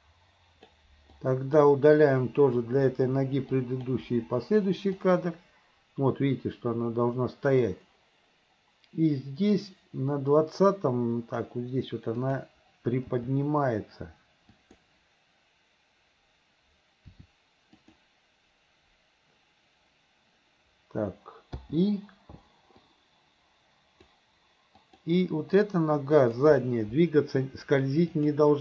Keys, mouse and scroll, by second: 1.1-1.6 drag, 2.9 Delete, 3.7 drag, 4.1 Delete, 5.1-11.5 drag, 12.3 click, 13.1 g, 17.1 r, 21.6 i, 22.9 click, 24.8 click, 26.2 click, 28.2 click.